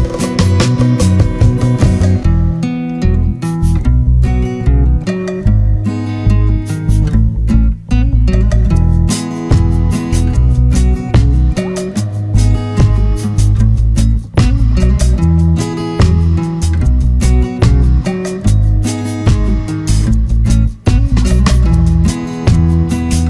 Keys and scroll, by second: 2.4 ctrl+-, 3.3 ctrl+d, 11.4 ctrl+=, 11.7 ctrl+space, 12.1 ctrl+=, 17.2 ctrl+z.